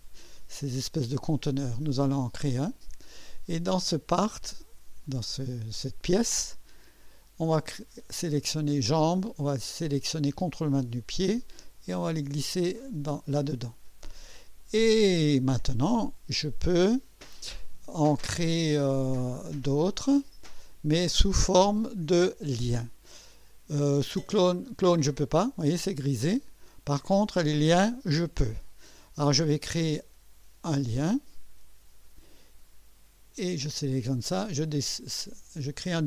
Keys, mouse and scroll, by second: 2.3 click, 4.1 click, 7.5 click, 10.8 ctrl+click, 11.6-13.1 ctrl+drag, 14.6 click, 20.0 click, 30.7 click, 33.3 click, 34.6 click.